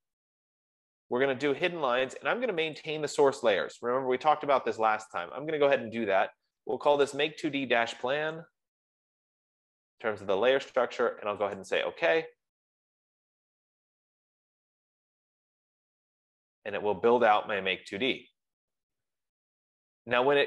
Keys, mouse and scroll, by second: 3.2 click, 7.8 click, 8.5-10.2 typing, 12.1 click, 15.6-17.2 drag, 18.7 F15.